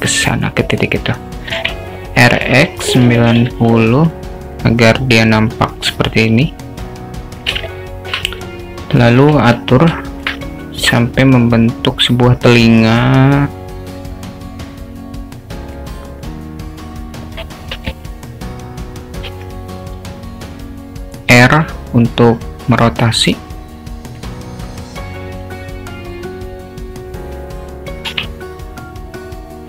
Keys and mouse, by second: 1.6 r, 4.6-7.5 drag, 7.7-8.1 alt+shift+middle drag, 9.2 Tab, 10.1 alt+shift+middle click, 10.8 click, 14.7-15.8 drag, 16.5 click, 19.3 r, 22.6-24.2 drag, 25.4 click, 28.1 r.